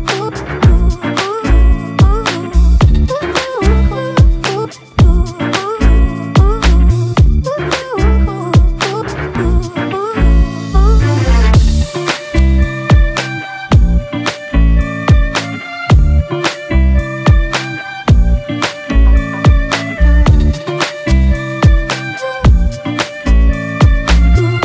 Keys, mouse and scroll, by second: 0.0 ctrl+t, 9.9 Return, 11.3 double click, 21.7-23.5 scroll up 1.